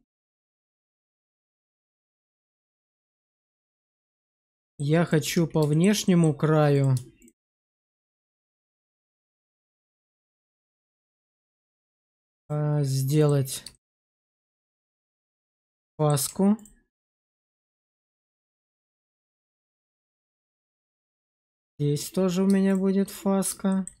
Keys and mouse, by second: 4.5 shift+middle drag, 5.1 Tab, 5.6 shift+middle click, 5.9 middle click, 6.6 click, 7.1 shift+click, 9.1 shift+click, 10.1 click, 10.4 click, 11.6 shift+click, 13.1 ctrl+click, 13.6 shift+middle click, 14.0 middle click, 15.3 shift+middle click, 15.7 middle click, 16.4 ctrl+middle click, 18.4 shift+middle click, 20.1 middle click, 23.0 middle click, 23.6 shift+middle click.